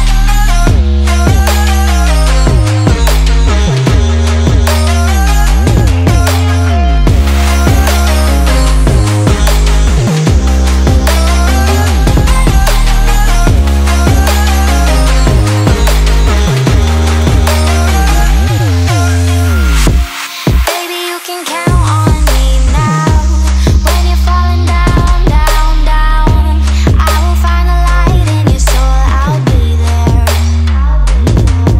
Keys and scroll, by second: 0.1 super+z, 0.4 super+z, 0.7 super+z, 1.5 super+z, 1.7 super+z, 2.4 super+z, 4.3 super+z, 5.2 super+z, 6.1 super+z, 7.1 super+z, 7.4 super+s, 8.6 super+z, 9.7 super+z, 10.3 super+z, 10.6 super+z, 11.5 super+z, 12.7 super+z, 13.2 super+s, 13.4 super+z, 14.2 super+z, 16.0 super+z, 18.9 super+z, 19.7 super+z, 20.5 super+z, 21.1 super+z, 21.7 super+z, 22.0 super+z, 22.2 super+z, 22.5 super+z, 23.8 super+z, 24.3 super+s, 24.6 super+z, 24.8 super+z, 25.5 super+s, 25.8 super+z, 26.2 super+z, 26.5 super+z, 27.0 super+s, 27.4 super+z, 28.0 super+z, 29.6 super+s, 30.3 super+z, 30.6 super+s, 31.1 super+z.